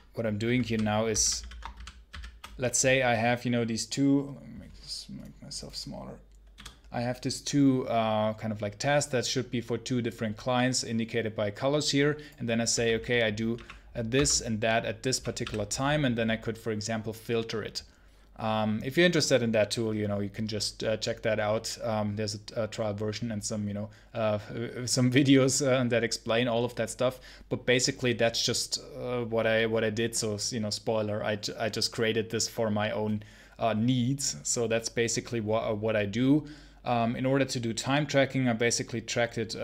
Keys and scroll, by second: 0.0-1.9 typing, 1.0 alt+k, 12.6-15.3 typing.